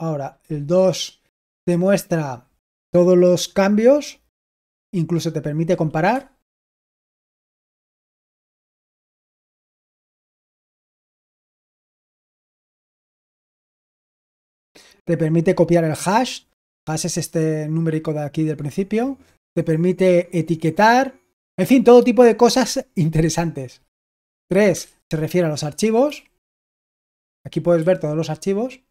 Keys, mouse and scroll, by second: 0.3 2, 6.8-12.3 typing, 24.7 3, 26.0 typing, 27.1-27.7 typing.